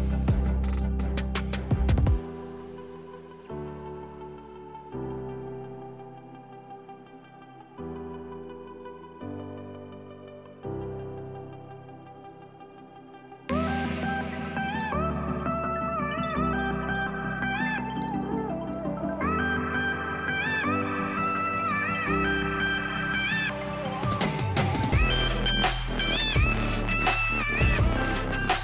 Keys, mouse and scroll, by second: 15.2 click, 26.2 click.